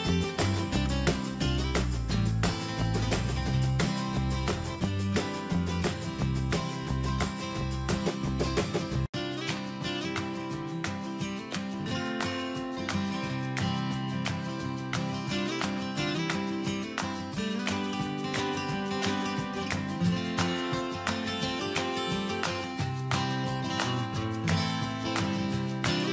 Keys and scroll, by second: 2.8 Return, 6.8 Return, 8.2 Delete, 11.5 BackSpace, 12.3 ctrl+d, 12.8 ctrl+space.